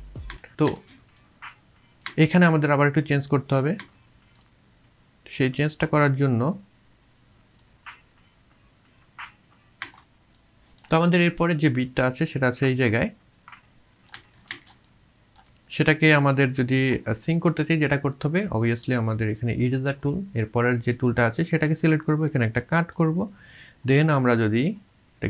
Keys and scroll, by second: 0.7 space, 7.6 space, 9.8 space, 14.2 space, 14.5 space, 24.0 v.